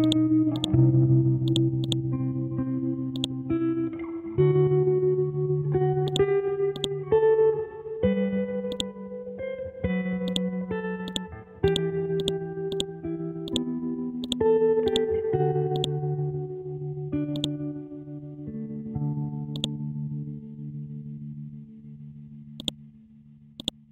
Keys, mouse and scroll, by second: 0.0 click, 0.1 click, 1.0 ctrl+z, 1.5 click, 4.1 b, 6.1 click, 8.2-8.7 scroll up 1, 8.7-19.0 drag, 19.0-19.5 scroll up 1, 19.5 click, 20.6 scroll down 1, 22.6 ctrl+click, 23.0-23.6 scroll down 1, 23.6-23.9 drag.